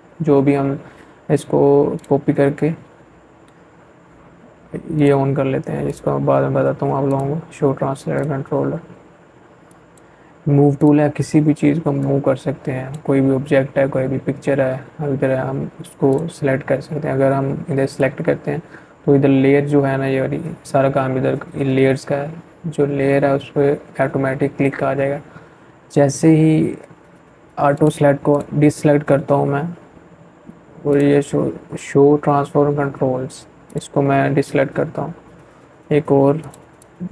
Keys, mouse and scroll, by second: 2.8-13.1 drag, 13.9 click, 25.5 click, 28.7 click, 31.5 click, 34.2 click, 35.8-37.1 alt+drag.